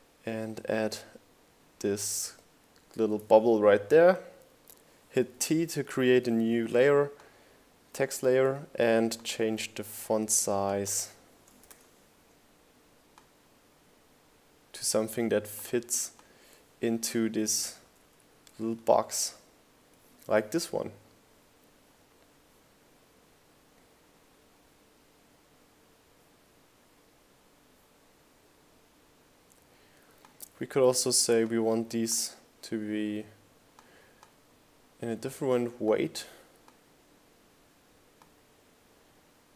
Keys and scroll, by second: 2.7 7, 2.9 Return, 8.3 Up, 8.7 Right, 9.0 Up, 9.9 Down.